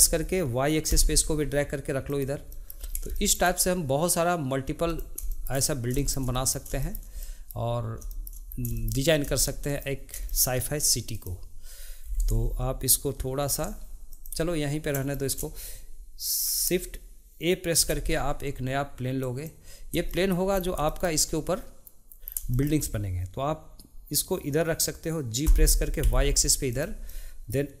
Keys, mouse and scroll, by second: 2.5 middle click, 3.1 shift+middle drag, 5.0 click, 5.3-8.5 shift+middle drag, 8.5 scroll down 2, 8.7-9.6 shift+middle drag, 9.6 click, 10.3-11.1 shift+middle drag, 11.1 click, 14.1 click, 15.1-17.7 shift+middle drag, 17.7 shift+a, 20.8-22.2 shift+middle drag, 22.5-25.5 shift+middle drag, 25.5 g, 27.1-27.8 middle drag.